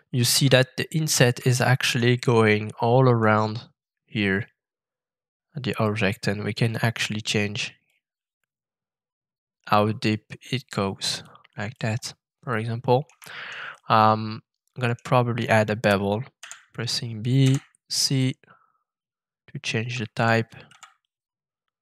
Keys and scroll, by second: 16.4 b, 17.4 c, 19.8 c, 20.1 c, 20.6 c.